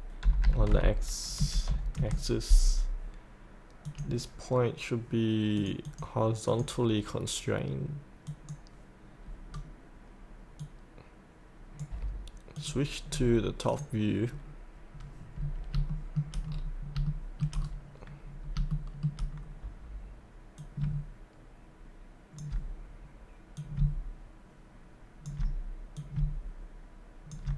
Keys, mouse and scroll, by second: 0.2 KP_8, 1.3 KP_Decimal, 1.7 KP_5, 3.9-6.5 drag, 9.5 scroll down 1, 10.6-12.0 drag, 13.0-13.7 scroll down 1, 13.7 click, 15.3-15.7 scroll down 1, 15.9 shift+middle click, 16.5-16.9 scroll down 1, 17.1 shift+middle click, 17.5-18.4 scroll down 1, 18.4 scroll up 1, 18.7 shift+middle click, 18.7 shift+middle click, 19.3-20.6 scroll down 1, 20.6-23.2 drag, 23.6-27.5 drag.